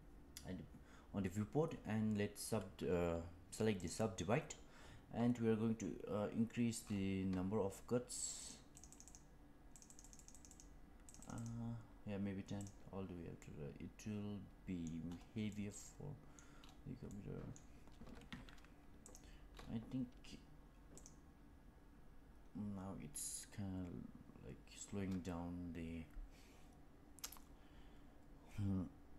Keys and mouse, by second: 8.3 click, 8.7 click, 8.8 click, 9.0 click, 9.8 click, 10.4 click, 13.3-14.7 middle drag, 15.4 middle click, 17.0 middle click.